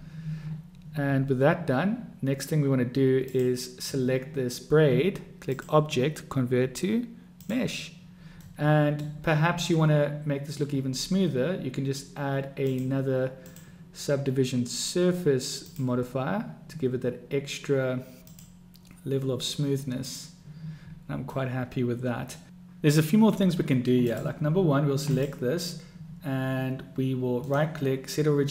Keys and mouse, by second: 3.4 click, 5.8-7.8 drag, 8.7-9.3 middle drag, 10.0-10.4 middle drag, 10.4-10.9 drag, 10.4-10.9 right drag, 12.9 click, 13.6-16.2 drag, 18.6 click, 20.4 click, 21.6-22.2 drag, 21.6-22.2 right drag, 22.2 middle click, 25.1 click, 27.5-28.5 right drag.